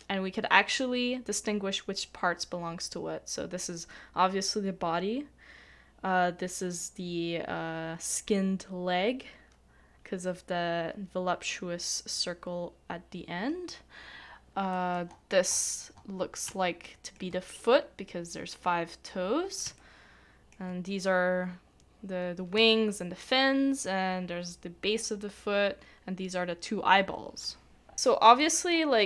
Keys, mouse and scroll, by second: 14.7 middle click, 15.1 scroll down 1, 15.5 scroll up 1, 15.6 scroll down 1, 15.7 scroll up 1, 16.8 shift+middle click, 19.8 shift+middle click, 22.7 shift+middle click, 27.9 scroll down 1, 28.0 scroll up 1, 28.1 scroll down 1, 28.2 scroll up 1, 28.4 middle click, 28.9-29.0 scroll down 1.